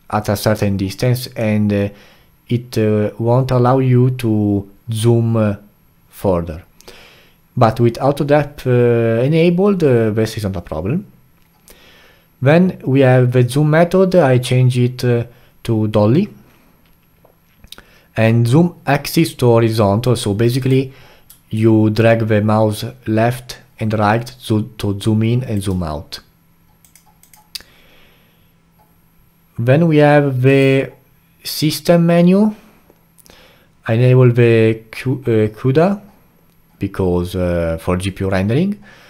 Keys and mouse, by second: 20.6 click, 21.5-24.5 alt+right drag.